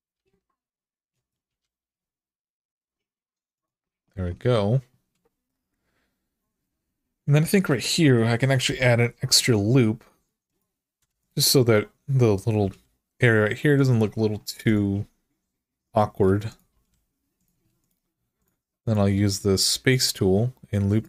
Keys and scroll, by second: 1.3 g, 8.4 k, 10.8 Return, 12.4 g, 16.5 g.